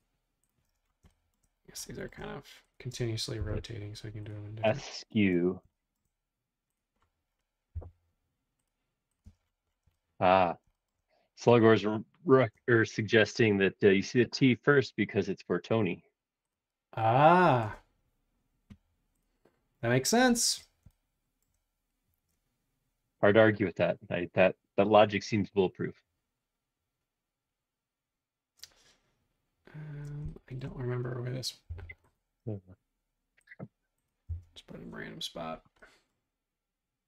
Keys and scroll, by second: 0.7 space, 1.9 space, 3.4 m, 5.3 space, 7.8 m, 9.2 space, 31.7 m, 34.3 Up.